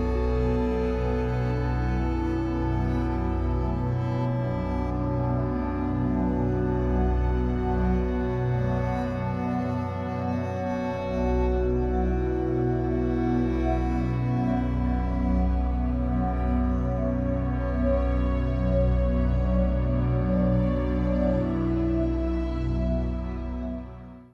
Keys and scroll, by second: 1.7 3, 2.9 r, 6.2 Escape.